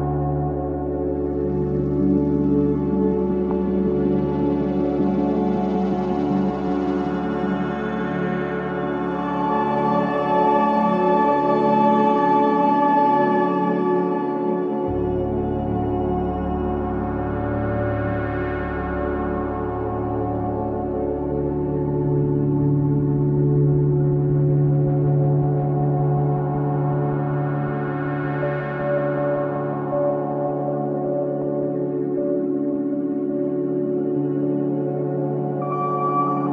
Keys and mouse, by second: 0.3-1.2 drag, 1.2 r, 1.5 x, 1.8 9, 1.9 0, 2.1 Return, 3.2-5.9 typing, 4.0 click, 5.9 click, 6.5-7.8 alt+drag, 14.4-15.9 alt+drag, 16.5 alt+click, 17.3 g, 17.6 z, 18.1 click, 19.1-23.0 drag, 24.0 click, 24.8-25.1 typing, 26.4 click, 30.5 ctrl+alt+click, 31.7-33.0 drag, 33.0-33.7 typing, 33.9 Return.